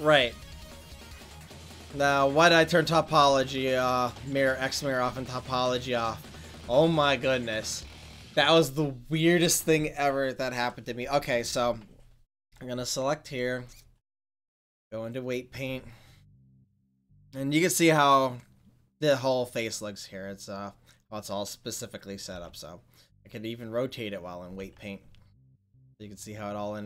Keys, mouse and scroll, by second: 1.9 ctrl+s, 22.3 r, 22.7 r.